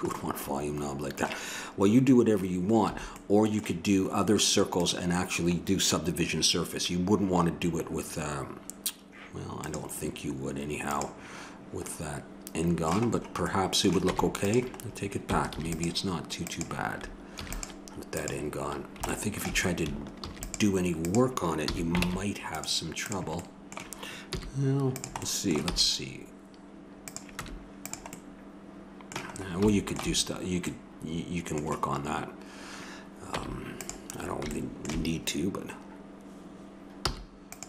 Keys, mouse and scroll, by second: 2.9 a, 4.8-11.4 drag, 14.1 Tab, 15.5 ctrl+r, 17.4 ctrl+r, 20.2 ctrl+r, 21.7 a, 22.0 ctrl+Tab, 23.0 right click, 23.4-24.8 drag, 24.3 i, 25.7 e, 27.4 Tab, 30.8-32.6 middle drag, 33.3 Tab, 34.2-36.5 middle drag, 37.0 i.